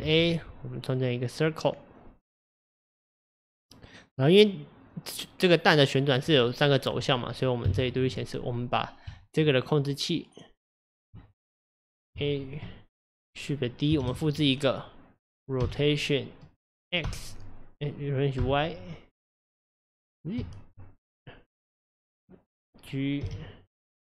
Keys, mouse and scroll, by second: 0.1 shift+a, 7.7 KP_Divide, 9.2 Tab, 11.8 click, 12.2 a, 14.0 shift+d, 23.3 g.